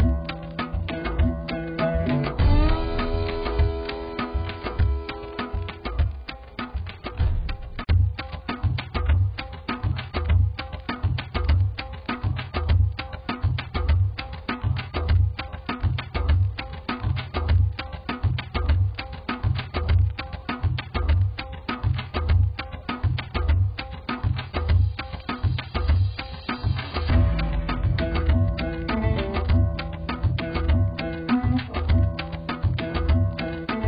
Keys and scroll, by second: 2.8 ctrl+t, 24.7 ctrl+g, 27.3-29.5 typing.